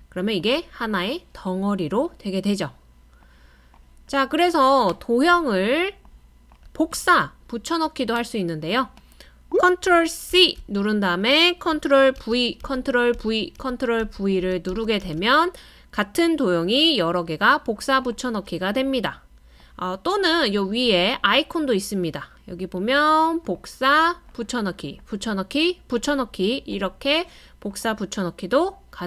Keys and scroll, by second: 10.3 super+c, 12.2 super+v, 12.6 super+v, 13.1 super+v.